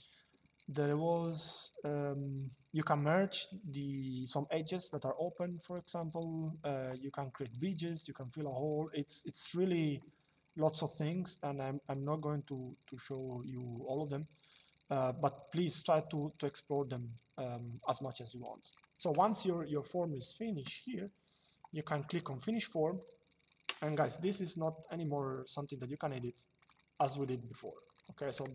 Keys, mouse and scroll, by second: 18.4 click, 22.7 click, 24.4 shift+middle click, 26.3 click, 26.8 shift+middle click, 27.5 click, 28.2 middle click.